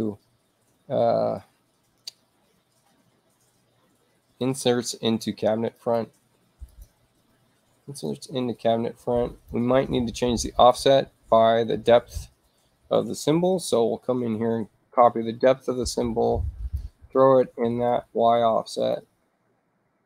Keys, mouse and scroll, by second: 4.4 click, 5.7 click, 6.7 click, 8.1-9.5 drag, 10.6 click, 11.8 click, 14.4 ctrl+c, 15.0 click, 16.5 click, 17.9 click, 18.8 click.